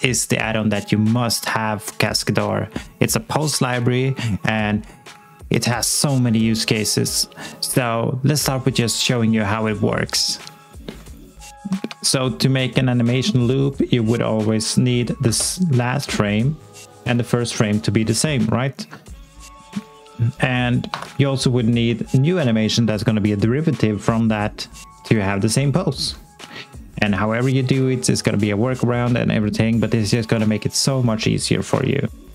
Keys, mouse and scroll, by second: 12.0-13.2 scroll down 1, 13.3-14.5 alt+scroll down 1, 15.2 scroll down 1, 16.3 click, 20.9 s, 21.5 alt+click, 32.2 click.